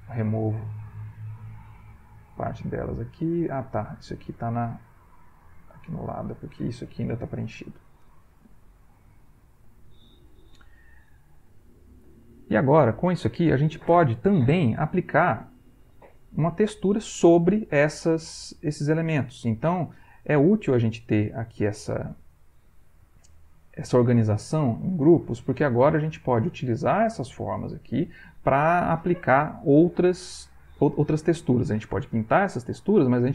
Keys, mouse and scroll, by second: 1.3 click, 1.8 click, 2.2 click, 2.5 click, 4.1 click, 5.4 click, 6.3 click, 7.2 Delete, 7.8-9.0 drag, 9.1 ctrl+click, 9.6 ctrl+middle click, 10.2 ctrl+middle click, 10.7 ctrl+middle click, 11.5 ctrl+middle click, 12.3 ctrl+middle click, 15.8 click, 16.6 click.